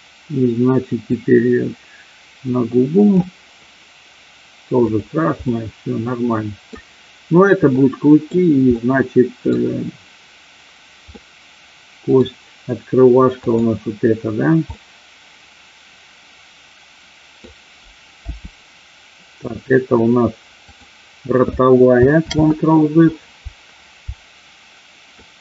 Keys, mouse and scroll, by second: 1.0-3.1 drag, 4.9 click, 5.5-6.7 middle drag, 7.7 middle click, 8.7 middle click, 11.1-12.1 middle drag, 13.4 click, 14.7-17.4 middle drag, 18.4 g, 20.8 click, 22.3 ctrl+z, 25.1-25.4 middle drag.